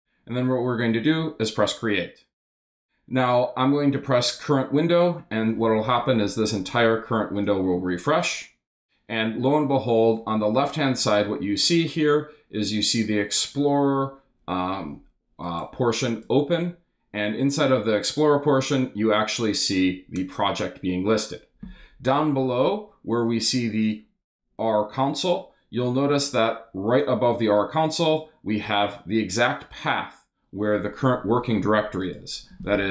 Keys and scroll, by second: 32.3-32.9 typing.